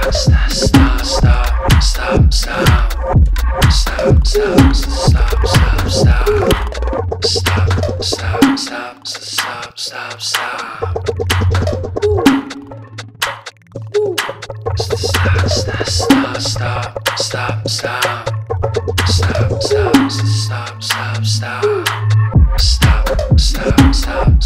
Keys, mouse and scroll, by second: 0.6 ctrl+space, 0.6-2.1 ctrl+click, 0.9 ctrl+space, 2.3 click, 2.5-3.0 space, 3.2 ctrl+space, 3.4 ctrl+click, 3.6-4.4 ctrl+space, 4.7 click, 4.8-5.2 space, 8.1 ctrl+click, 14.4 click, 17.9 [, 18.6 click, 21.8 typing, 24.0 click, 24.2 ctrl+z.